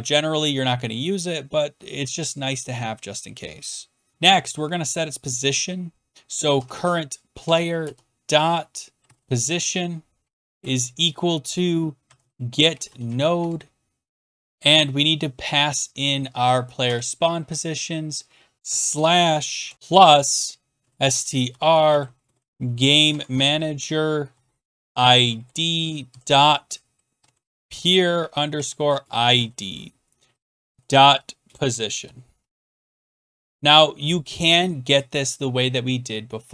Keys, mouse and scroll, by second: 3.9-13.5 typing, 7.4 Tab, 16.2 Down, 16.4 Down, 16.8 Return, 17.3 Right, 18.6 click, 18.6-33.3 typing, 19.7 Escape, 30.2 Right, 30.3 Right, 33.5 Return, 36.0 click.